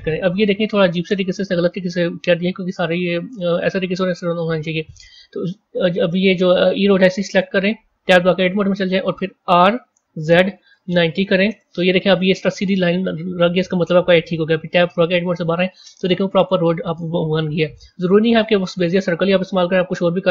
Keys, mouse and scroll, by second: 8.0 Tab, 9.2 r, 12.4-12.8 scroll down 7, 13.2-13.6 scroll up 8, 15.1 Tab, 16.0-19.1 middle drag.